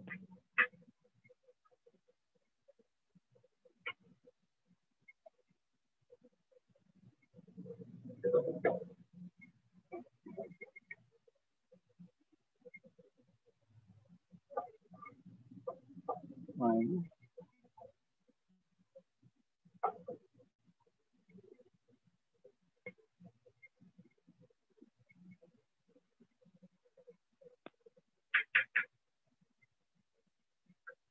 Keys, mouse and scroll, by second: 3.1 alt+click, 3.4 alt+click, 4.6 click, 5.2 shift+click, 6.1 click, 7.3 click, 8.2 click, 8.4 click, 8.9 click, 9.3 click, 11.0-11.6 scroll, 11.4 click, 12.2-13.5 shift+click, 13.0 click, 13.5 alt+click, 14.0 alt+click, 14.5 alt+click, 14.7 alt+click, 15.1 alt+click, 15.4 alt+click, 15.9 alt+click, 16.3 alt+click, 17.4 click, 18.3 alt+click, 18.7 alt+click, 19.1 alt+click, 19.5 alt+click, 20.2 alt+click, 20.7 alt+click, 21.4 alt+click, 23.0-24.5 shift+click, 24.5 click, 24.5 click, 27.0-29.5 shift+click, 27.6 click, 28.3 click, 28.7 click, 29.6 click, 30.6 click, 30.9 click.